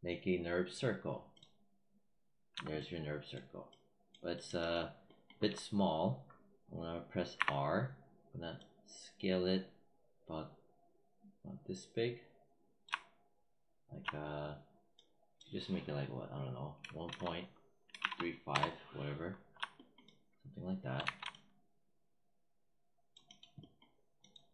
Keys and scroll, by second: 7.2 r, 16.7-18.3 typing, 18.4 Return, 20.9 w.